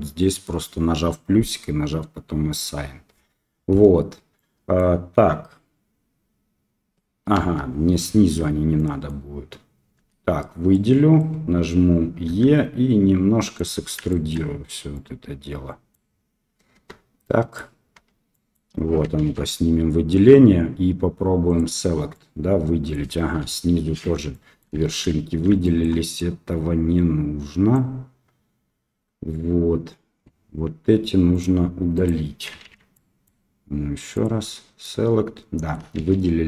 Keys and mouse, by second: 4.3 middle click, 7.3 KP_1, 8.7 middle click, 9.9 a, 10.7 middle click, 14.0 shift+middle click, 14.9-15.9 middle drag, 16.7 Tab, 17.2-17.5 middle drag, 18.0 Tab, 18.3 middle click, 19.1 alt+a, 22.1 middle click, 23.4 KP_1, 24.3 shift+middle click, 24.9 shift+z, 25.6 shift+middle click, 26.2-27.7 drag, 31.9 click, 32.6 alt+a, 32.9 middle click, 34.8 middle click, 35.9 shift+z, 36.2 middle click.